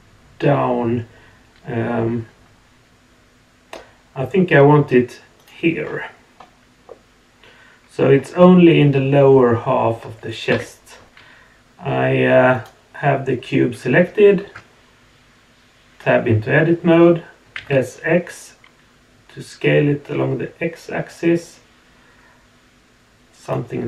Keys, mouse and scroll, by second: 5.8-6.8 scroll down 2, 6.8-8.1 middle drag, 10.5 KP_1, 12.5 click, 14.4 Tab.